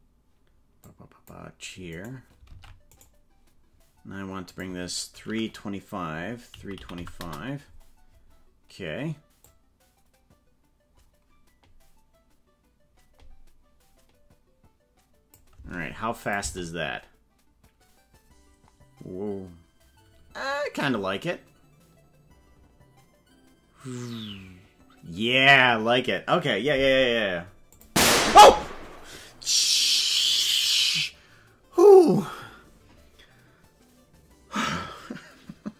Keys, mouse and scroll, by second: 0.9 click, 2.0 right click, 2.5 ctrl+Tab, 3.0 right click, 4.5-7.9 drag, 9.5-15.5 drag, 16.2 click, 16.4 space, 27.7 click.